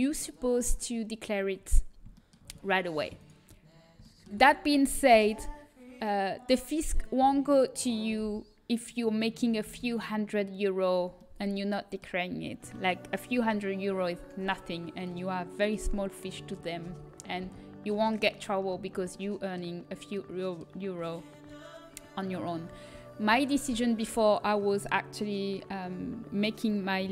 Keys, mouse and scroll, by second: 0.8 middle click, 2.1 middle click, 3.0-6.1 right drag, 6.1 g, 7.3 z, 9.6 a, 11.1 middle click, 14.9 middle click, 16.8 a, 17.3 a, 18.7-20.3 middle drag.